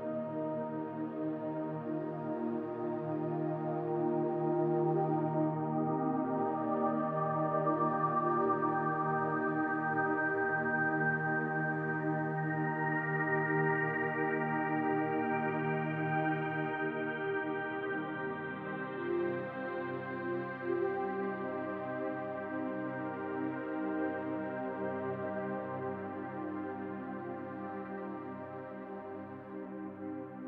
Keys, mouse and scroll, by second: 0.3 click, 2.2 click, 2.4 l, 3.4 click, 4.6 scroll down 3, 4.9 middle click, 5.7 click, 6.3 l, 7.4 click, 9.4 middle click, 12.1-12.4 scroll up 2, 12.5 middle click, 13.9 click, 15.2 l, 16.7 click, 18.0 click, 18.6 l, 19.1 click, 20.7 click, 21.0 l, 21.8 click, 23.0 click, 23.4 l, 24.0 click, 26.0 middle click, 27.1 click, 27.5 l, 28.2 click, 28.4 l, 29.2 middle click, 29.9 click.